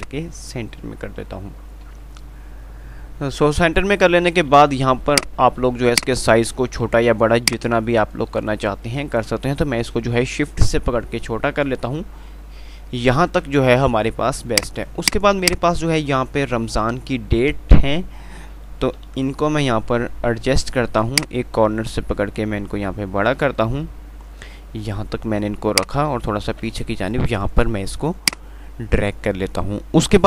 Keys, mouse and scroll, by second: 2.5 F3, 5.4 click, 5.4 typing, 7.7-10.7 shift+drag, 10.7 ctrl+r, 14.8-19.3 drag, 19.3 shift+Page_Up.